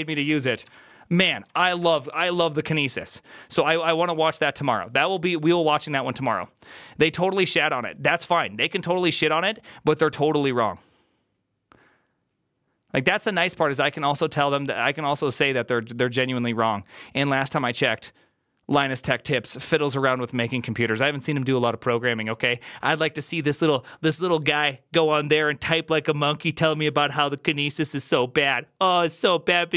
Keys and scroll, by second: 1.3-2.2 typing.